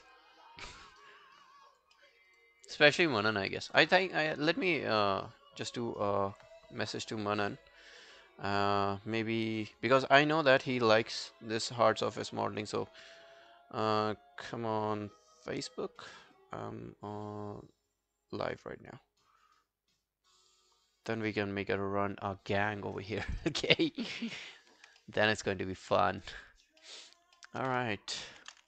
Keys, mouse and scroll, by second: 2.0 alt+middle click, 2.2 alt+right click, 2.4 alt+click, 24.7 scroll down 2, 25.0 alt+middle click, 25.3 alt+right click, 25.6 alt+click, 26.0 alt+middle click, 26.2 alt+right click, 26.5 alt+click, 26.8 alt+middle click, 27.1 alt+right click, 27.4 alt+middle click, 28.3 ctrl+i.